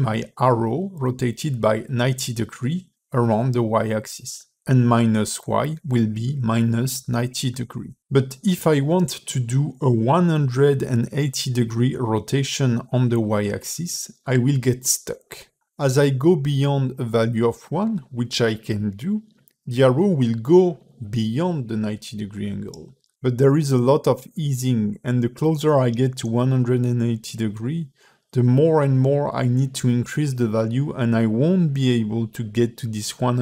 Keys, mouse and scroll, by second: 1.5 click, 8.8 click, 12.6 click, 15.2 ctrl+r, 15.2 middle click, 15.2 scroll down 2, 15.6 KP_1, 16.4-16.7 scroll up 2, 17.8 click, 22.4-23.7 scroll down 2, 23.7 click, 27.2 click, 28.0 click, 29.1 KP_0, 30.9 shift+middle click, 31.3-31.9 scroll up 10, 31.9 shift+middle click, 32.1 shift+middle click, 32.4-32.7 scroll up 3, 32.9 shift+middle click, 33.2 scroll up 2.